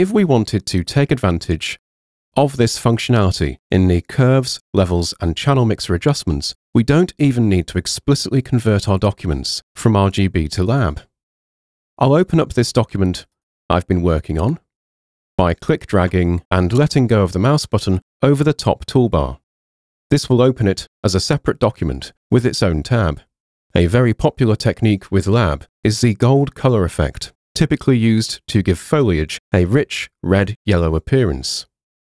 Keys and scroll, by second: 11.6 super+Tab, 12.4 super+Tab, 15.2 super+Tab, 16.4 super+Tab.